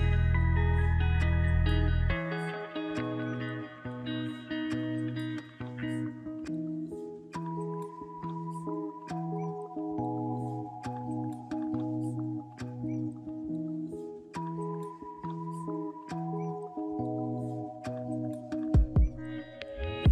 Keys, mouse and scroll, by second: 3.5 &, 8.6 Delete, 17.4 1, 18.4 Return.